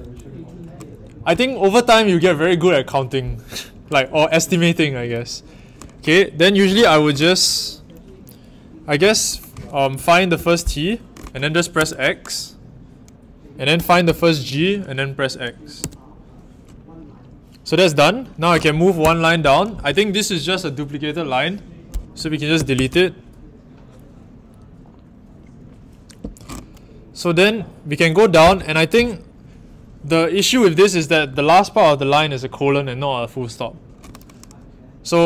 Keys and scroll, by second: 9.9-10.3 typing, 11.7 x, 13.7-14.0 typing, 15.7 x, 19.0 i, 22.5 typing, 28.4 i.